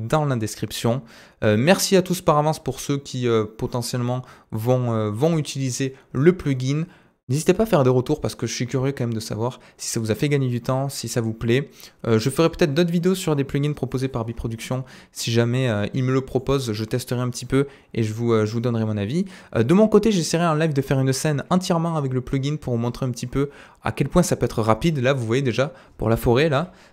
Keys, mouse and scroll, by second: 11.8 right click, 13.0 click, 14.7 middle click, 15.4-15.7 scroll down 1, 15.7-16.4 scroll up 4, 16.4 middle click, 26.3 middle click, 26.7 F11.